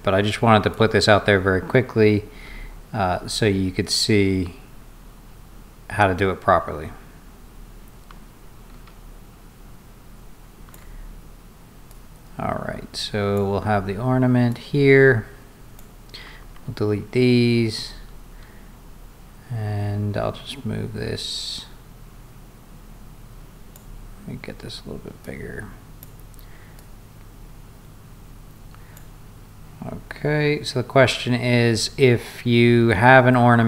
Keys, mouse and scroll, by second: 0.7-10.7 shift+drag, 11.9-13.4 drag, 14.5-15.8 drag, 17.0 scroll down 1, 17.1 middle click, 17.3-17.9 scroll up 2, 17.7 middle click, 20.5-23.8 drag, 25.3 click, 26.8-29.0 drag, 32.7 middle click, 32.7 scroll down 2.